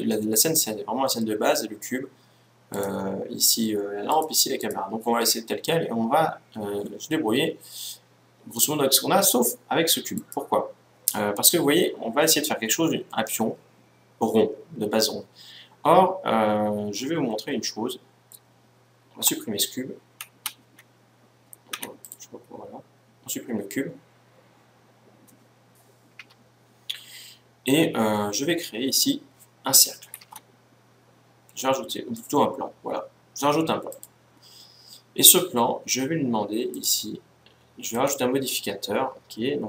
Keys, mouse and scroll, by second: 2.7-6.3 right drag, 10.1-12.1 right drag, 19.5 Delete, 21.7 x, 29.8 shift+a, 36.4-39.6 drag.